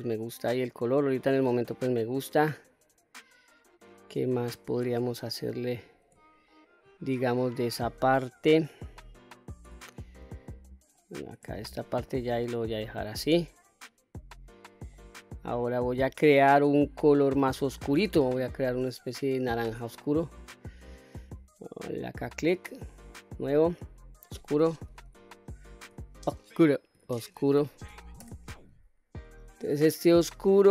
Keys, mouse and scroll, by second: 0.7-1.2 middle drag, 1.5-5.3 middle drag, 5.7 scroll down 1, 6.2 shift+middle click, 6.9-7.4 scroll up 1, 7.4-8.8 middle drag, 7.4-7.9 scroll up 1, 9.2-9.6 scroll down 1, 9.6-10.4 middle drag, 10.8-11.3 scroll down 2, 11.4-11.9 shift+middle drag, 12.3-14.8 middle drag, 15.1-15.4 scroll up 1, 15.5 scroll down 2, 16.2-17.2 middle drag, 18.5-19.9 scroll up 4, 22.1 click, 23.1 click, 23.8-30.0 drag.